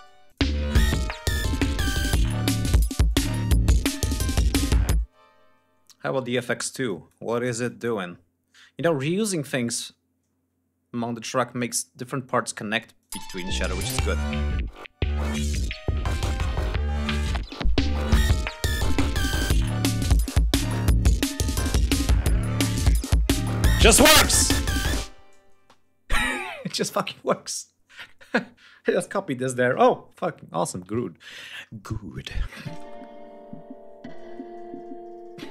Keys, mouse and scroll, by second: 0.0 click, 0.3 ctrl+scroll up 1, 1.9 ctrl+scroll down 1, 2.5 ctrl+click, 3.4 ctrl+click, 3.7-4.3 ctrl+scroll down 4, 4.7 space, 5.6 ctrl+scroll down 2, 6.6-7.0 drag, 7.4-8.9 ctrl+drag, 8.9 ctrl+scroll up 2, 10.0 ctrl+scroll up 2, 10.2 ctrl+scroll down 2, 10.9-12.3 drag, 12.7 click, 12.8 space, 13.3 ctrl+scroll down 2, 13.6 ctrl+scroll up 2, 15.5 click, 16.7 ctrl+scroll up 2, 18.6 ctrl+scroll down 2, 19.0 ctrl+scroll up 2, 20.4 click, 20.7 click, 21.7 ctrl+scroll down 2, 25.3 space, 30.8 ctrl+scroll down 2, 31.8 click, 32.4 space, 33.1-33.6 scroll up 2, 34.1 ctrl+scroll up 2, 35.3-35.5 scroll down 4.